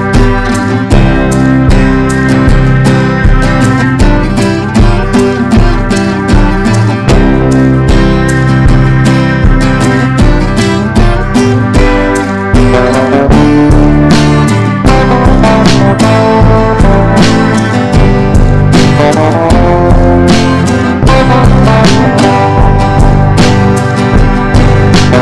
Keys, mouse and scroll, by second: 20.8 shift+click, 21.4-25.1 drag.